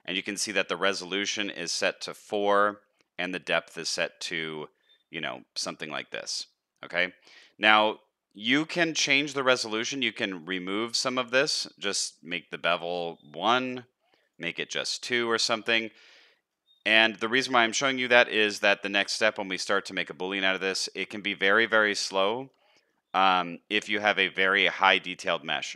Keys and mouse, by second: 15.7 middle click, 16.7 middle click, 19.0-19.3 middle drag, 20.0 shift+middle drag, 20.8 shift+middle click, 21.6 shift+middle drag, 22.1-22.5 middle drag, 22.6 shift+middle drag, 23.1 middle click, 25.5-25.7 middle drag.